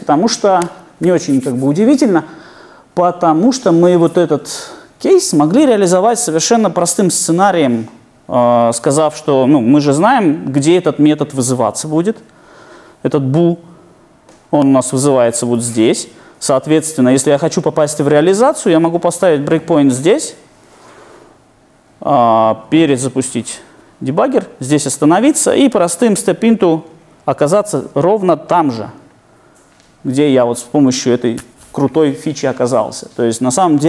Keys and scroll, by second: 19.5 super+F8, 22.5 ctrl+d, 29.2 F7.